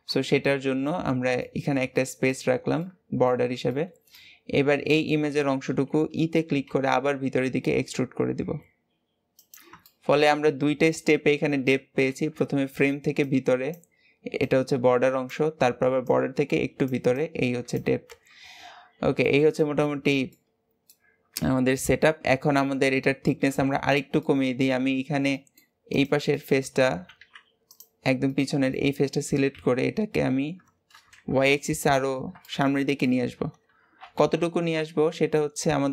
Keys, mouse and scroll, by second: 0.8-4.4 middle drag, 4.4-6.7 scroll up 1, 6.7 e, 9.8 shift+middle click, 10.3-10.9 scroll up 4, 10.9 middle click, 11.3-12.1 scroll up 3, 12.1-12.9 scroll up 1, 12.9-14.1 scroll up 1, 14.1-16.3 scroll up 1, 16.3-18.1 scroll up 1, 18.2-19.2 scroll down 11, 19.2-22.0 shift+middle drag, 22.0 KP_7, 22.7-23.3 scroll up 3, 23.3 shift+middle click, 23.8 alt+z, 24.1-25.9 middle drag, 25.9 click, 26.3 middle click, 27.1 alt+z, 27.7 click, 28.3-29.5 middle drag, 29.5 KP_7, 30.3-31.1 scroll up 2, 31.1 alt+z, 31.7-32.9 shift+middle drag, 32.9-33.5 scroll up 2, 33.6 g.